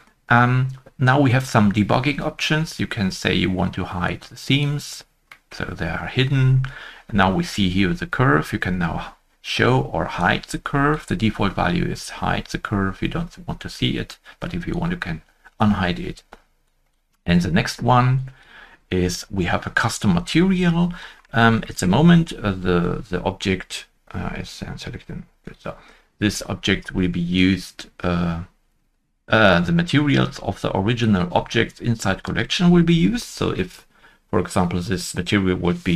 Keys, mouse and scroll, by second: 3.0 shift+middle click, 3.0 scroll down 1, 3.1 middle click, 5.2 scroll up 1, 5.3 shift+middle click, 7.1-10.1 scroll up 1, 21.0-21.4 scroll up 1, 21.7 scroll up 1, 21.7 shift+middle click, 27.2 shift+middle click, 27.3 scroll up 1, 27.3 shift+middle click, 27.3 shift+click.